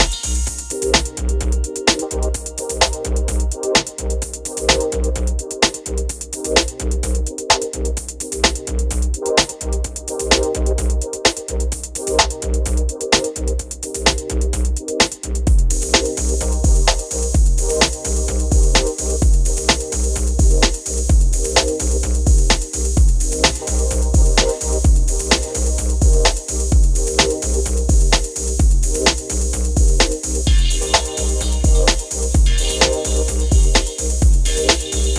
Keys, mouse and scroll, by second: 1.0 click, 8.5 Tab, 9.5 click, 11.6 click, 14.8 Caps_Lock, 16.2 click, 18.4-21.2 typing, 21.6 Return, 23.0 click, 24.6 Caps_Lock, 24.9-26.3 typing, 27.3-31.8 drag, 34.1 ctrl+j.